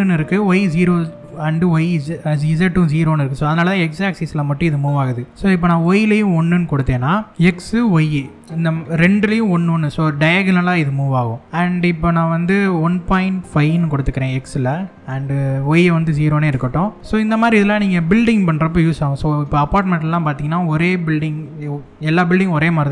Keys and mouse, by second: 5.3-7.3 drag, 11.4 middle click, 12.3-14.9 drag, 15.3-16.6 drag, 17.0-17.6 middle drag.